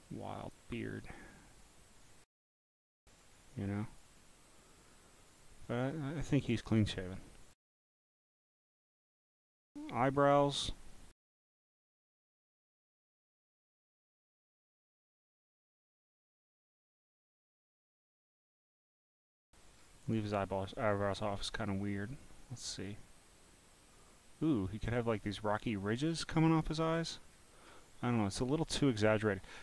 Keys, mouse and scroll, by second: 0.4 click, 1.3 click, 2.5 click, 3.2 click, 5.3 click, 5.9-7.2 drag, 8.9 click, 9.9 click, 12.1 click, 13.1 click, 13.7 scroll down 2, 14.2 click, 15.3 click, 16.2 click, 18.1 click, 18.6 click, 19.8 scroll, 19.8 scroll, 20.2 scroll down 5, 20.7 click, 22.7 click, 23.5 click, 24.4 click, 25.1-25.7 scroll down 2, 26.2 click, 27.3 scroll, 27.3 scroll, 27.4 scroll, 27.7 scroll, 28.2 click.